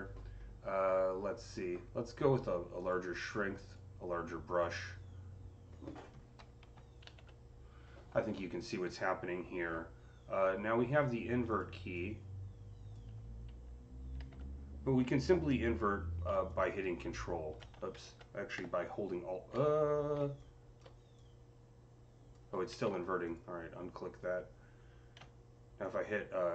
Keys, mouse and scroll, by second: 2.6 ctrl+z, 2.6 click, 3.5 click, 4.5-9.1 drag, 6.9 z, 11.3 click, 11.3 z, 11.8-16.3 drag, 14.1 ctrl+z, 16.3-20.3 ctrl+drag, 17.8 ctrl+z, 20.3-25.7 alt+drag, 22.6 ctrl+z, 25.7-26.5 ctrl+drag.